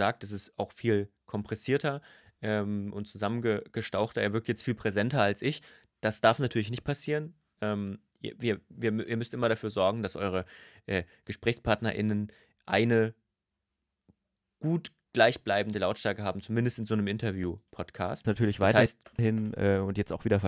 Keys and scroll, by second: 18.0 space, 20.2 space.